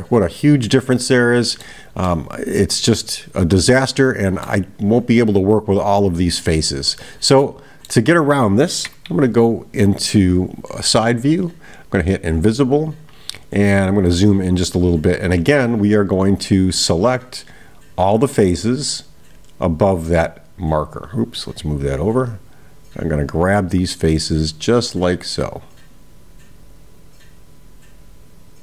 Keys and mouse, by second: 2.1-4.6 middle drag, 6.9-8.1 middle drag, 11.8 click, 18.0 click, 20.2-21.6 drag, 22.4-28.6 drag.